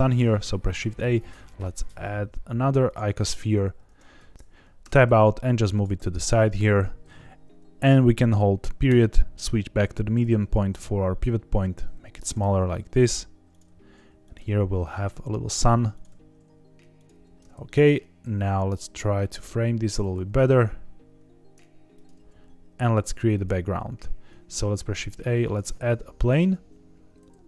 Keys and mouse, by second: 0.3 shift+a, 3.8 Tab, 4.1 s, 4.3 ctrl+z, 4.3 g, 4.8 Tab, 5.1 g, 5.7 click, 5.9 s, 6.7 Escape, 8.8 ., 10.3 s, 12.2 click, 12.4 g, 13.5 click, 13.6 s, 14.2 click, 14.3 g, 15.9 click, 16.0 s, 16.9 click, 17.1 g, 18.2 g, 19.8 click, 20.0 g, 20.0 z, 20.2 z, 21.9 click, 22.1 g, 23.3 click, 24.5 shift+a.